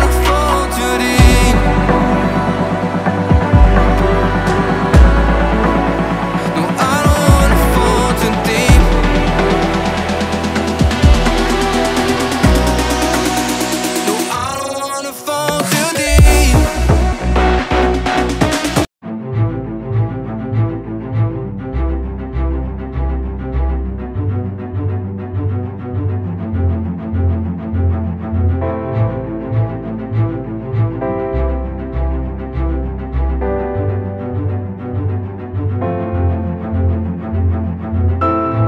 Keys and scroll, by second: 3.4 ctrl+g, 5.3 space, 6.5 space, 7.5 Up, 10.4 space, 16.3 space.